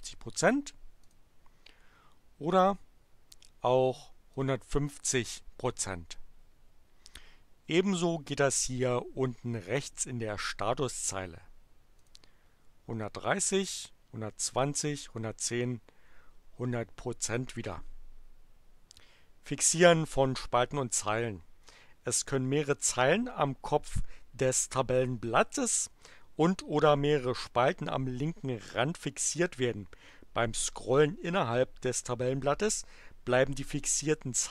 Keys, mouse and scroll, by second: 1.0 click, 4.2 click, 11.9 click, 13.2 click, 14.4 click, 15.4 click.